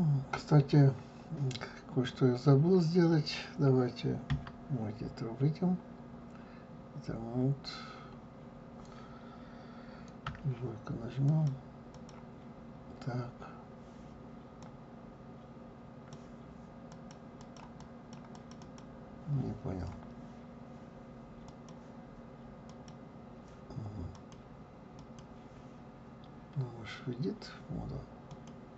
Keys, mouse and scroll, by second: 4.3 Tab, 11.2 click, 11.9 click, 14.6-17.1 drag, 17.3 click, 17.8 click, 18.3 click, 18.6 click, 21.4 click, 22.6 click, 24.1 click, 24.9 click, 28.3 click.